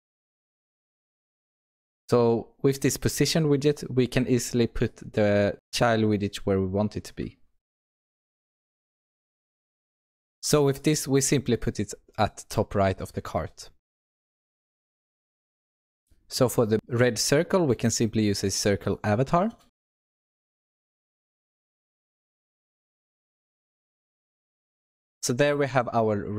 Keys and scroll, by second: 0.8 Return, 8.3 Return, 10.1 ctrl+BackSpace, 14.3 Return, 20.6 Return, 21.2 Escape, 22.6 Return, 23.7 Return.